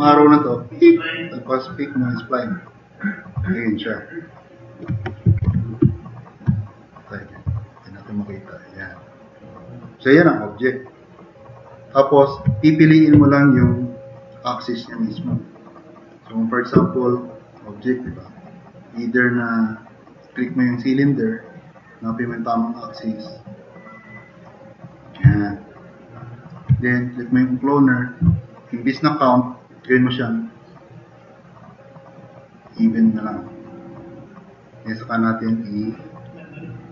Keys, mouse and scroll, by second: 3.5 drag, 3.7 middle drag, 3.7 scroll up 2, 5.0-6.0 typing, 7.7 drag, 8.2-8.5 drag, 8.9 click, 9.5 click, 10.0 drag.